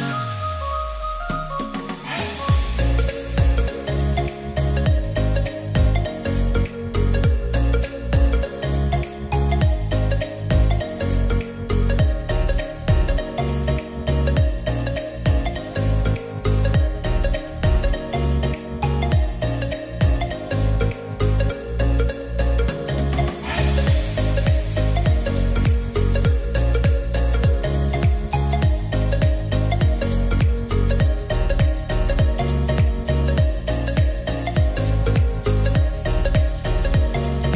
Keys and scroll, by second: 1.1 ctrl+r, 12.4 ctrl+r, 19.5 ctrl+r, 25.9 ctrl+r, 34.2-35.0 typing.